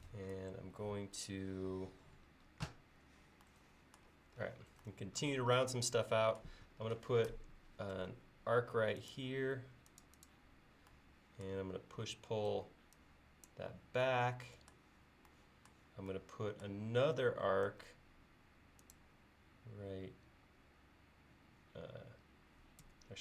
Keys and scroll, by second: 8.0 a, 12.5 p, 17.7 a, 22.9 r.